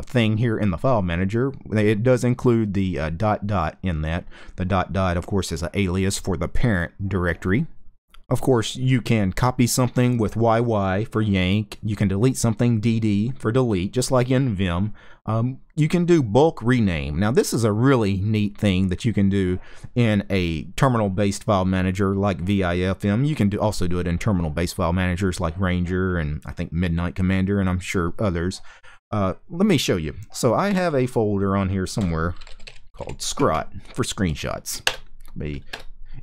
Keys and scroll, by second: 31.4-33.2 typing, 34.5 Return, 35.4 Return.